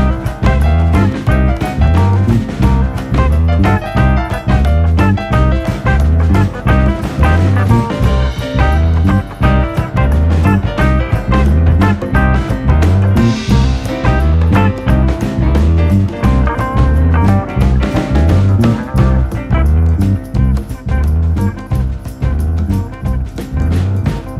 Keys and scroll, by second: 7.5-8.4 scroll, 9.4-10.1 scroll, 10.1 ctrl+c, 10.3-11.0 scroll, 12.7 ctrl+v, 16.8 ctrl+d, 17.5 ctrl+d, 18.8 u, 22.1 ctrl+v.